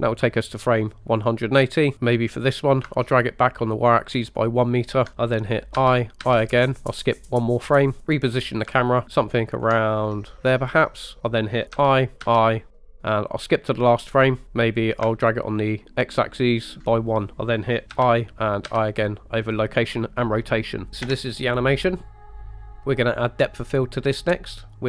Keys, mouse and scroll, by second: 1.9 click, 2.5-5.0 drag, 5.8 i, 6.3 i, 7.8 click, 8.1-9.3 drag, 9.5 ctrl+click, 11.8 i, 12.3 i, 14.2 drag, 15.0-16.8 ctrl+drag, 17.3 ctrl+z, 17.3 i, 17.9 i, 18.7 i, 21.1 space, 22.9 middle click.